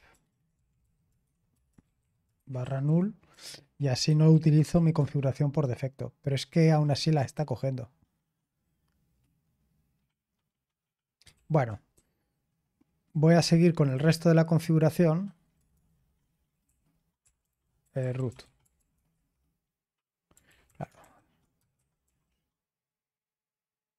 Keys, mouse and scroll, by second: 0.7 BackSpace, 1.8 BackSpace, 2.3-4.6 BackSpace, 4.9 space, 11.3 ctrl+p, 11.9-13.0 Left, 13.3 Left, 13.9-19.4 typing, 20.4 ctrl+r, 21.7-22.5 typing.